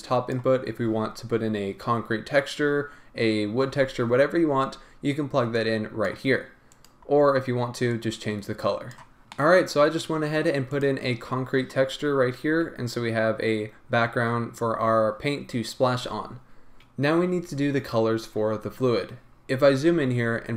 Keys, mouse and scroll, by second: 0.3 click, 5.6-6.1 drag, 6.8 click, 9.2-10.7 middle drag, 10.7 click, 12.0-12.5 scroll up 1, 16.8-19.1 scroll down 1, 19.1-19.4 scroll up 1.